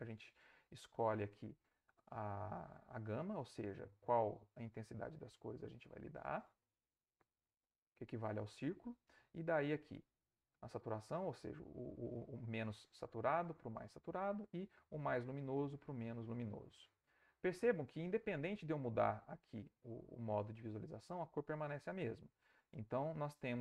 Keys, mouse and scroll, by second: 0.2-9.3 drag, 10.0-18.3 drag, 18.8 click, 20.2 click, 20.6 click.